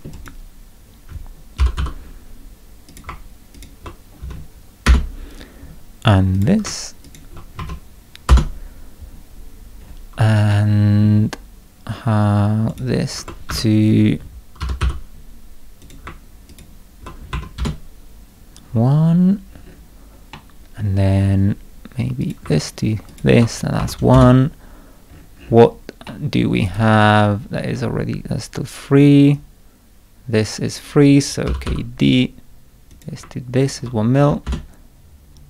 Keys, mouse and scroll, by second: 0.1 click, 0.8 scroll up 2, 1.3-2.3 typing, 2.9 click, 3.5 ctrl+click, 4.2 1, 4.8 Return, 6.3 click, 7.0 ctrl+click, 7.6 1, 8.3 Return, 9.8 scroll up 2, 10.5 scroll up 2, 10.5 middle click, 12.7 click, 13.5 Escape, 14.4-15.3 typing, 15.8 click, 16.5 ctrl+click, 17.3 1, 17.6 Return, 17.6 ., 19.0 scroll up 2, 19.5-19.9 scroll down 2, 20.3 middle click, 21.1 scroll up 2, 22.2 click, 23.1 ctrl+click, 23.8 1, 24.1 Return, 25.1 scroll up 2, 25.3 scroll down 2, 26.1 middle click, 26.6 right click, 27.3 scroll down 2, 29.3-30.7 drag, 31.2-32.1 typing, 32.9 click, 33.6 ctrl+click, 34.2 1, 34.4 Return.